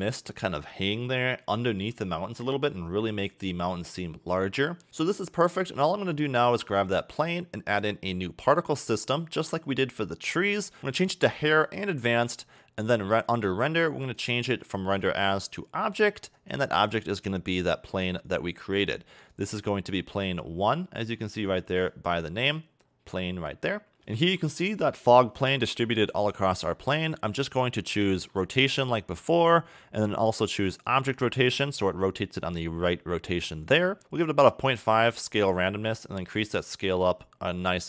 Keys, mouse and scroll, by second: 4.9-6.2 scroll up 1, 6.2 click, 7.7 click, 8.9 click, 10.8-11.7 scroll up 3, 11.7 click, 12.1-14.0 scroll down 10, 14.0 click, 15.6-16.0 scroll down 6, 16.4 click, 20.3-20.9 scroll down 7, 21.1 scroll up 2, 21.9 click, 23.8 scroll up 4, 24.0 scroll down 2, 24.0 a, 24.3 a, 24.6 click, 28.3 click, 28.8-30.9 scroll down 15, 30.9 click, 35.7 click.